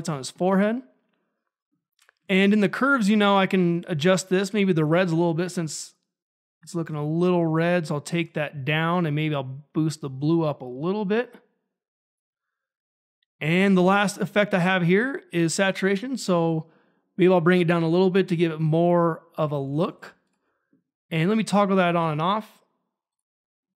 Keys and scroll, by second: 19.9 ctrl+`.